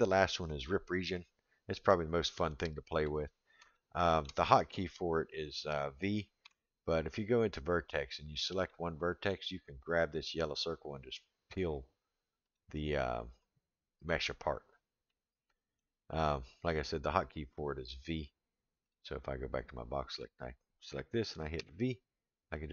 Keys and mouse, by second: 0.9 click, 2.3-3.1 middle drag, 3.7-4.2 shift+middle drag, 6.4 1, 8.1 click, 8.7-9.3 middle drag, 10.6 click, 13.4 click, 15.1 middle click, 20.1 click, 21.6 v.